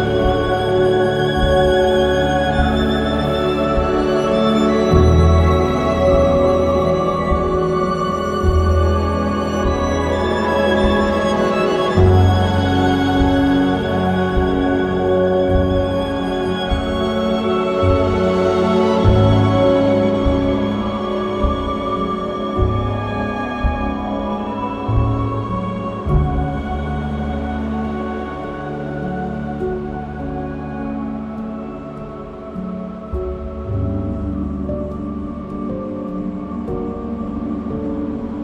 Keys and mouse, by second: 1.1 click, 2.2 click, 3.9 click, 5.0 click, 6.1 click, 8.1 click, 9.4 click, 12.4 click, 13.8 click, 14.4 click, 17.1 click, 17.8 click, 18.7 click, 20.1 click, 21.4 click, 22.6 click, 25.2 click, 28.8 click, 33.8 click, 35.4 click, 36.9 click, 38.3 click.